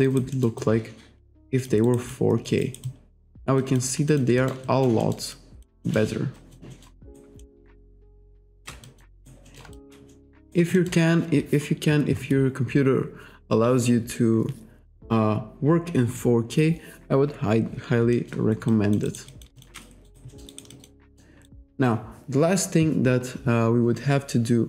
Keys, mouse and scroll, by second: 0.1 alt+right click, 0.4 alt+middle click, 1.9 alt+right click, 2.2 alt+click, 2.9 alt+click, 3.6 alt+click, 4.1 alt+click, 4.4 alt+middle click, 5.4 alt+click, 5.9 alt+middle click, 6.4 alt+click, 6.8 alt+middle click, 7.5 alt+middle click, 7.8 alt+middle click, 8.1 shift+right click, 8.9 alt+click, 9.5 alt+middle click, 9.8 alt+shift+click, 10.1 alt+middle click, 10.8 alt+middle click, 18.2 alt+middle click, 18.7 alt+click, 19.3 alt+click, 19.6 alt+shift+click, 20.1 alt+right click, 20.6 alt+right click, 20.8 alt+click, 21.1 alt+middle click, 21.5 alt+right click.